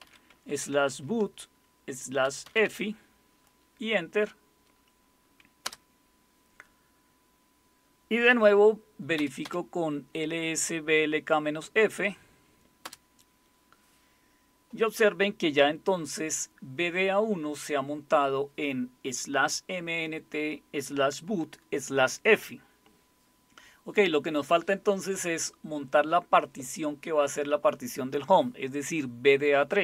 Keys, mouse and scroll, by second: 0.0-0.5 typing, 2.2-2.6 typing, 5.6 Return, 9.1 Up, 9.4 Up, 12.8 Return.